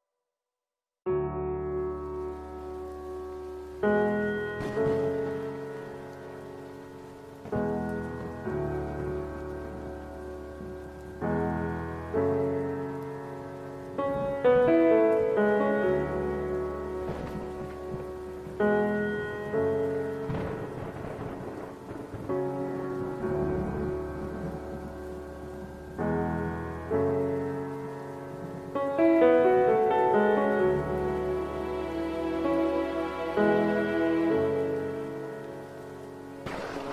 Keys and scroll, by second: 0.9 F6, 2.4 Escape, 11.2 Return, 13.7 ctrl+KP_0, 17.9 ctrl+F12, 21.5 F6, 23.4 ctrl+shift+n, 25.4 KP_4, 25.6 KP_1, 26.3 Return, 26.6 Return, 27.1 Tab, 27.3 Tab.